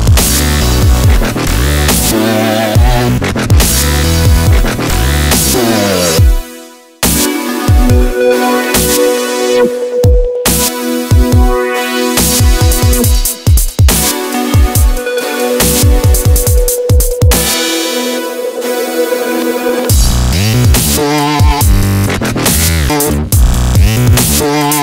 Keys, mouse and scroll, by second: 0.7 a, 1.5-3.0 right drag, 2.1 ctrl+b, 5.3 a, 6.1-9.0 right drag, 6.7 a, 7.8 ctrl+b, 10.5 a, 11.1 middle click, 12.3-13.6 middle drag, 13.8-16.7 middle drag, 16.7-17.7 drag, 16.9-18.1 right drag, 17.7 i, 19.3 i, 21.7-23.2 middle drag, 22.7 a, 24.0 click, 24.7-24.8 right drag.